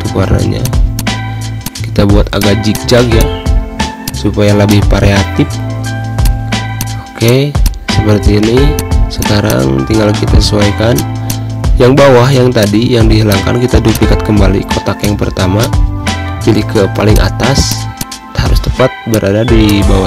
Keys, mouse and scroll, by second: 6.2 z, 6.4 click, 6.8 space, 6.9 click, 7.1 space, 7.3 click, 7.7 v, 8.4-10.6 drag, 10.8 space, 10.9 click, 11.1 space, 12.2 click, 15.5 click, 15.8 ], 16.8 click, 19.3 shift+click, 19.9 right click.